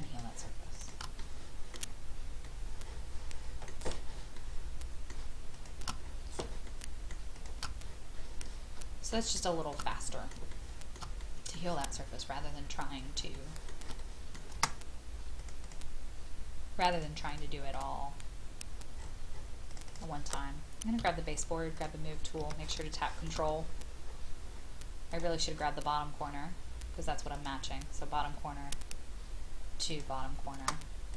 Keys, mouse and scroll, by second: 0.0 shift+click, 0.7 shift+click, 1.2 middle click, 2.4 shift+middle click, 4.3 shift+middle click, 5.5 shift+click, 6.0-6.4 scroll down 1, 6.7 shift+middle click, 7.3 shift+click, 7.8-8.4 scroll down 1, 8.4 middle click, 9.3 shift+middle click, 9.9 middle click, 10.5 shift+middle click, 11.2 middle click, 11.8-13.2 scroll down 1, 13.6 shift+middle click, 14.0 middle click, 15.4-16.7 drag, 18.9-19.7 scroll up 1, 19.7 click, 21.0 m, 22.9 shift+middle click, 23.6 scroll up 1, 25.1 click, 25.5-27.3 scroll up 1, 27.3 click.